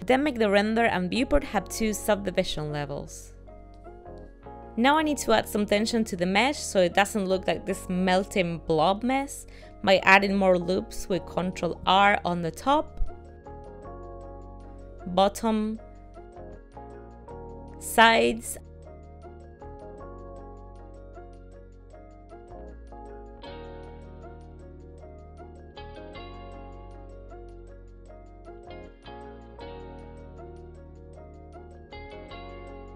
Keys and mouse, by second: 3.1 click, 11.9 ctrl+r, 14.3 ctrl+r, 19.0 ctrl+r, 22.5 middle click, 24.9 ctrl+r, 28.1 middle click, 30.2 ctrl+r.